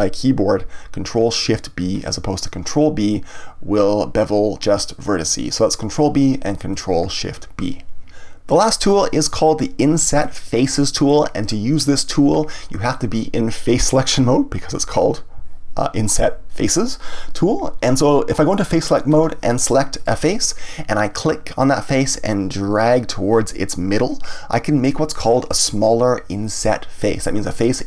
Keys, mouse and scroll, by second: 6.8 click, 10.5-13.5 drag, 18.7 click, 19.9 click, 21.9 click.